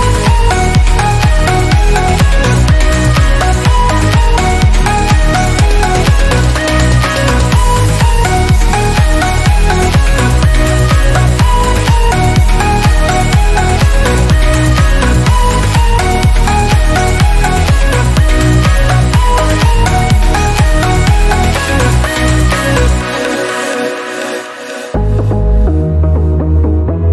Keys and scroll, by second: 2.3 ctrl+alt+d, 16.2 ctrl+alt+d, 25.0 F12.